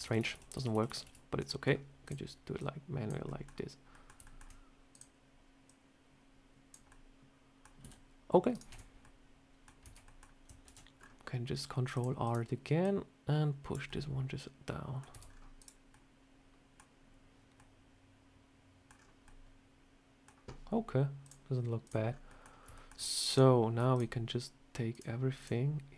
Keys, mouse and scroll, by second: 0.1 ctrl+z, 0.2 ctrl+z, 0.9 ctrl+z, 1.4 middle click, 1.9 click, 2.5 click, 3.2 middle click, 3.8 middle click, 4.1 shift+middle click, 4.3 shift+middle click, 4.8 click, 5.6 click, 6.8 middle click, 7.7 s, 8.6 Tab, 8.9 middle click, 9.7 Tab, 10.0 middle click, 10.5 ctrl+r, 12.7 click, 13.8 middle click, 15.0 Tab, 15.1 scroll down 3, 15.5 click, 15.8 middle click, 17.5 middle click, 18.9 scroll down 2, 19.2 middle click, 21.1 click, 22.0 scroll up 3, 22.2 middle click, 22.4 scroll down 1, 22.5 scroll up 2, 22.6 shift+middle click, 23.2 click, 23.8 shift+click.